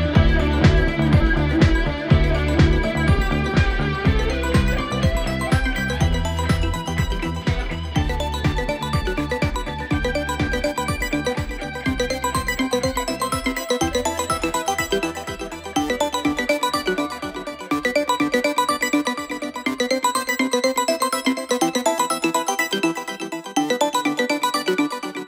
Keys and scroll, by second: 0.7 4, 3.9 3, 4.7 ctrl+d, 4.8 Escape, 7.8 ], 8.7 4, 12.6 3, 16.9 4, 19.7 F9, 20.9 2.